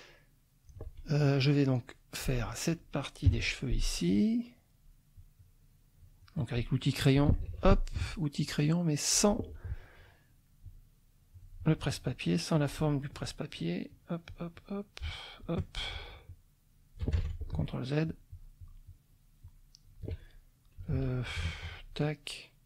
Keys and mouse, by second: 0.1 click, 1.3 click, 3.2 F6, 5.2-6.4 drag, 7.5 ctrl+shift+z, 8.1-9.3 drag, 10.6 click, 12.2 shift+click, 12.7 shift+click, 13.5-15.6 shift+drag, 16.3 shift+click, 17.2 ctrl+shift+z, 17.6-20.0 ctrl+shift+drag, 20.9 ctrl+z, 21.7 shift+click.